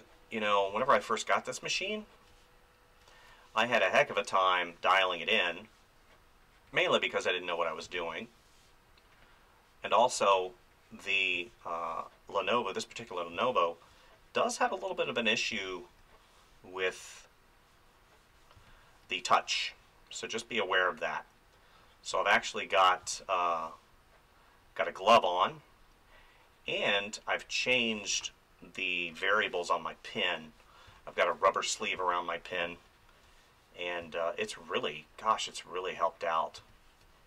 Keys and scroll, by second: 0.7 space, 7.8 space, 11.3 space, 13.3 space, 15.5 space, 18.5 space, 23.0 space, 27.8 space, 30.8 space, 36.6 space.